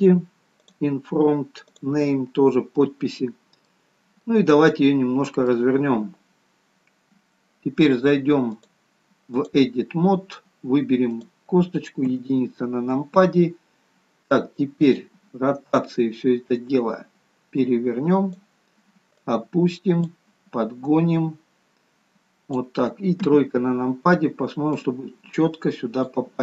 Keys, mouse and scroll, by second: 2.3-3.1 scroll up 3, 2.7 middle click, 3.8-4.7 scroll down 3, 4.2 middle click, 8.4 click, 12.1 KP_1, 14.8 click, 23.2 KP_3, 24.7 click.